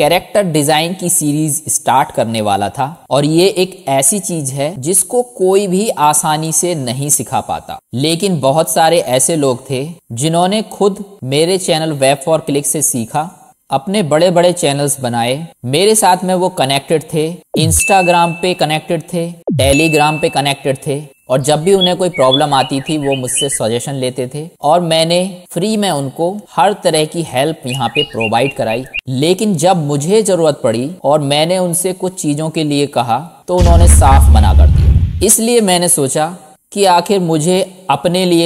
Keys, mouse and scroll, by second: 0.0 KP_1, 1.1 ctrl+Tab, 1.4 middle click, 2.1-6.2 typing, 2.6 ctrl+z, 4.6 ctrl+Tab, 6.0 click, 7.6 KP_3, 7.6 r.